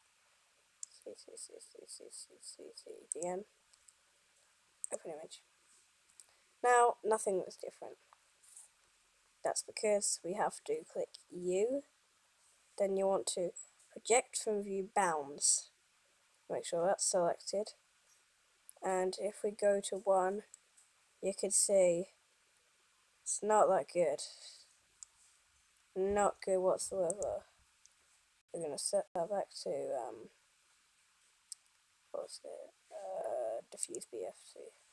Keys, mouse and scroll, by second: 5.4 click, 11.6 u, 20.1 KP_1, 23.0 middle click.